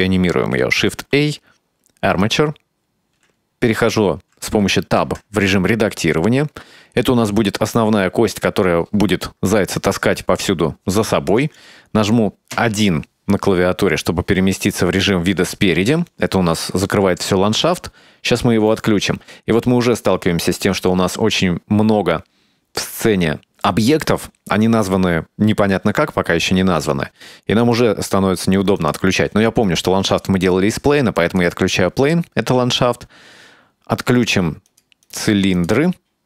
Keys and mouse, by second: 1.0 shift+a, 5.1 Tab, 12.6 KP_1, 20.1 click, 27.7 click, 28.9 click, 31.3 click, 34.8 click, 35.1 click, 35.6 click.